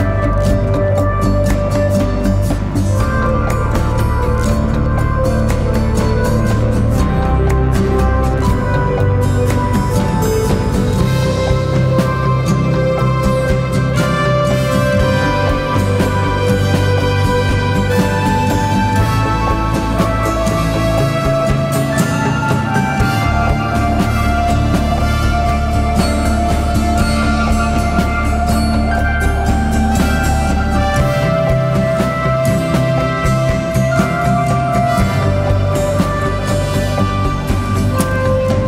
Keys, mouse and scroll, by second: 6.5 ctrl+t, 8.1 alt+shift+click, 13.0 Return, 18.8-19.9 scroll up 1, 27.4 ctrl+t, 30.2 alt+shift+click, 33.3 Return, 33.9 Down, 34.2 Down, 34.5 Right, 34.8 Up.